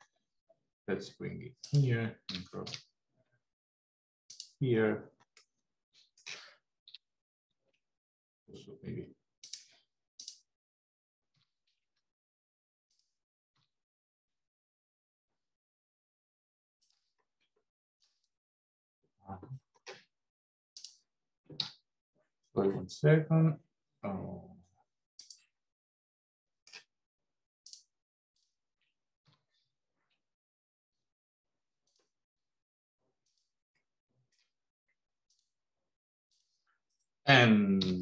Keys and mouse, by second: 2.2 g, 5.5 middle click, 6.8 g, 11.2 g, 13.4 r, 20.6 click, 21.6 r, 25.7 middle click, 27.5 click, 29.2 g, 33.1 click, 33.8 middle click, 35.2 click, 36.2 shift+click, 37.7 g.